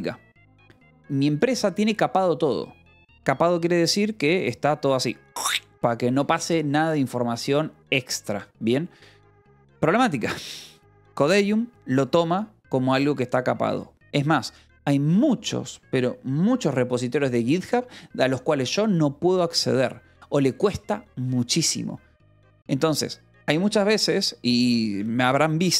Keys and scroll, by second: 23.9 w.